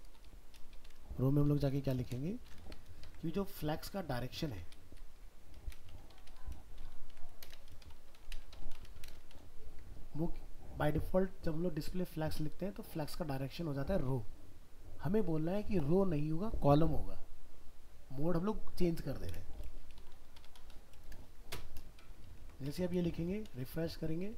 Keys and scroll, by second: 22.3 ctrl+s, 22.7 alt+Tab.